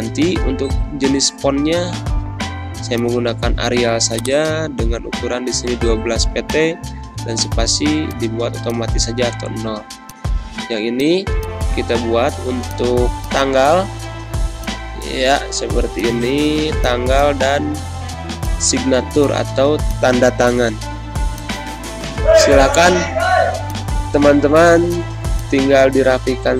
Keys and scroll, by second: 0.1-2.2 typing, 4.4-5.4 typing, 9.3 ctrl+x, 14.3 t, 14.7 ctrl+a, 15.0 ctrl+v, 17.8 ctrl+x, 20.8 ctrl+z, 23.4 t, 23.8 ctrl+a, 24.2 ctrl+v.